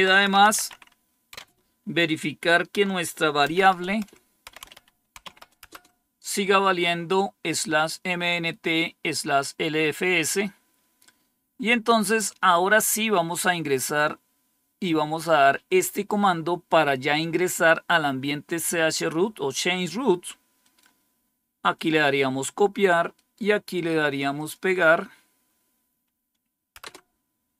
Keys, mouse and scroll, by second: 0.0-1.2 typing, 3.4-5.5 typing, 11.9-20.5 drag, 20.5-21.6 right drag, 21.6 click, 23.0 right click, 24.2-26.7 drag, 26.7 Return.